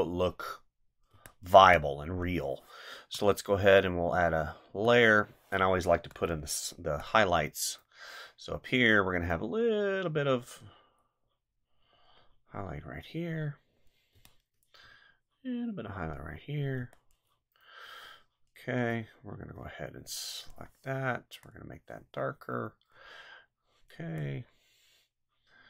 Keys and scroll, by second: 1.1 space, 14.1 space, 16.8 space.